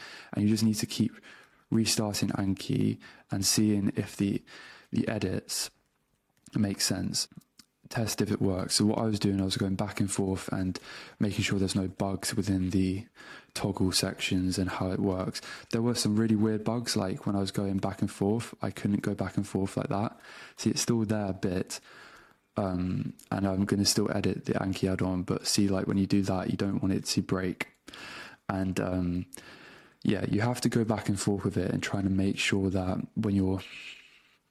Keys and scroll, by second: 1.4 super+q, 4.0 super+space, 4.6 n, 5.8 BackSpace, 6.4 n, 7.0 Return, 8.6 a, 10.4 space, 11.3 Return, 11.9 k, 12.1 Return, 13.3 space, 14.7 Return, 14.9 -, 15.1 space, 16.9 alt+BackSpace, 17.8 BackSpace, 18.8 Return, 19.0 BackSpace, 19.2 Return, 20.3 super+BackSpace, 21.6 Return, 22.2-27.1 typing, 24.3 Return, 24.9 Return, 25.5 Return, 26.7 Return, 27.7 Return, 28.1 BackSpace, 28.3 Return, 28.7 BackSpace, 29.3 super+Return, 29.9 BackSpace, 31.4 BackSpace, 32.2 alt+BackSpace, 33.4 BackSpace.